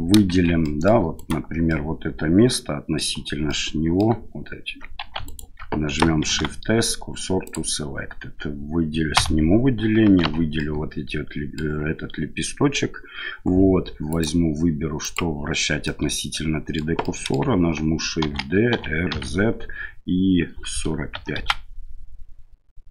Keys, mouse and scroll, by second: 0.3 shift+z, 0.6 middle click, 1.2 alt+middle click, 1.7-3.0 middle drag, 3.5 middle click, 5.0 2, 5.2 alt+right click, 6.3 shift+s, 9.2 a, 10.2 l, 10.6-11.6 middle drag, 14.2-15.2 drag, 15.8-16.8 middle drag, 17.1 middle click, 18.2 shift+d.